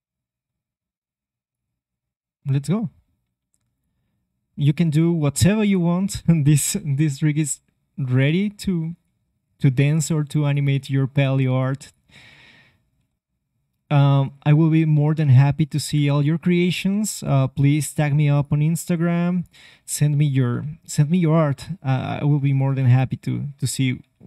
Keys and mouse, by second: 2.5-3.7 middle drag, 3.7 right click, 5.4 space, 6.6 KP_3, 7.5 r, 9.6 g, 11.2-13.1 drag, 13.0 r, 14.3-16.2 drag, 15.8 KP_7, 16.9 r, 18.3 click, 18.8 r, 21.0 click, 21.0 c, 22.8 c, 24.0 r.